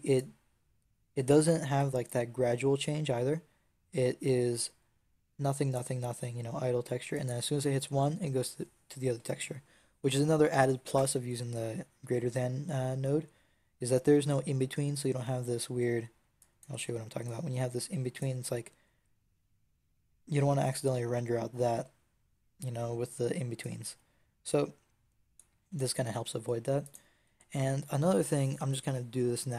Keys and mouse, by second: 7.0-13.8 drag, 16.3-18.7 drag, 18.7 z, 21.5 z, 23.5-24.7 drag, 25.0-29.5 drag.